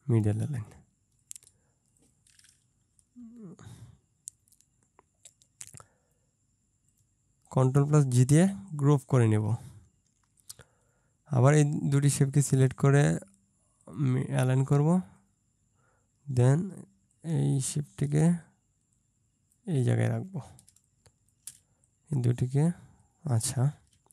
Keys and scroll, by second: 3.1 Down, 8.6 ctrl+space, 20.7 ctrl+space, 24.0 ctrl+space.